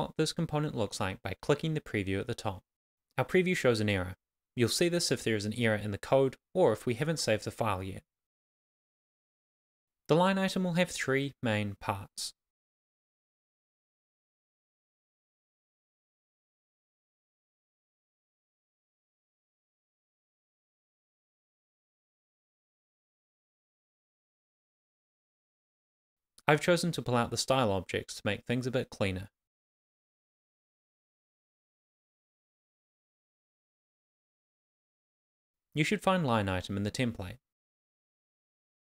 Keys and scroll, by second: 3.9 super+s, 7.5 Return, 8.3 Up, 8.5 shift+super+Right, 8.8 super+c, 9.1 Return, 9.2 super+v, 9.3 Return, 9.6 super+v, 9.9 Up, 10.1 Left, 11.1 alt+shift+Left, 12.6 Down, 12.7 Right, 13.2 alt+shift+Left, 16.8 Down, 17.5 Down, 18.1 Right, 20.5 Return, 21.0 Up, 21.2 Tab, 21.4 shift+,, 23.7 shift+., 24.3 Return, 24.4 shift+,, 25.6-28.0 typing, 25.8 Left, 26.9 Right, 28.3 Up, 28.6 Left, 33.3 shift+[, 33.4 shift+], 33.5 Left, 34.1 shift+s, 34.6 Right, 36.7 Down, 38.3 super+Right, 38.6 Return.